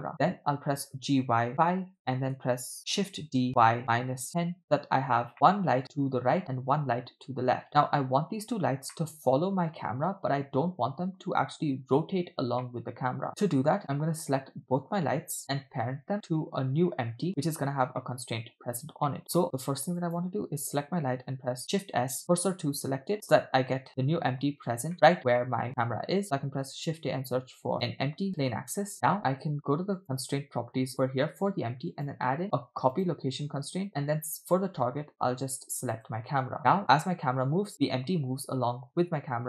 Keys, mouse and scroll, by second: 1.0 g, 3.0 shift+d, 5.3-5.8 middle drag, 9.0 middle click, 12.7-14.9 middle drag, 16.3-17.3 middle drag, 17.7 scroll down 1, 18.1-18.6 middle drag, 18.7 scroll up 2, 19.1 middle click, 20.0 click, 21.6 shift+s, 24.9 middle click, 25.4-25.7 shift+middle drag, 26.5 shift+a, 28.9 middle click, 30.0 click, 31.9-33.2 drag, 33.9 click, 36.9 space.